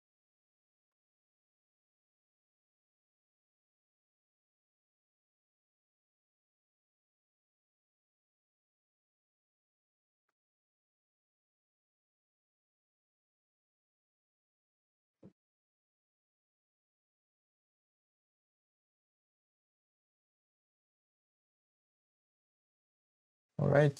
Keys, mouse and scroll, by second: 0.7 scroll up 1, 0.9-2.0 shift+middle drag, 2.0 ctrl+r, 4.1 s, 8.2 scroll down 3, 8.4-9.5 shift+middle drag, 9.5 scroll up 2, 9.8 shift+middle click, 10.5 ctrl+r, 16.5-17.6 shift+middle drag, 17.6 ctrl+r.